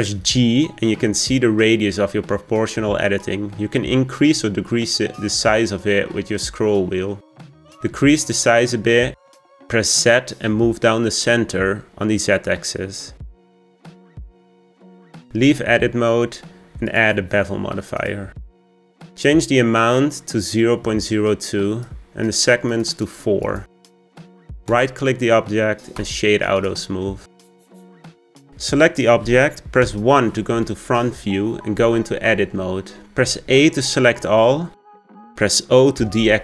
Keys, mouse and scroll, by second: 0.2 g, 15.0-16.0 middle drag, 16.0 Tab, 17.7-23.1 drag, 23.5-25.5 drag, 25.5-27.4 right drag, 27.4 click, 27.9-29.0 middle drag, 29.0 click, 30.7 KP_1, 32.7 Tab, 34.1 a, 34.8-36.4 shift+middle drag.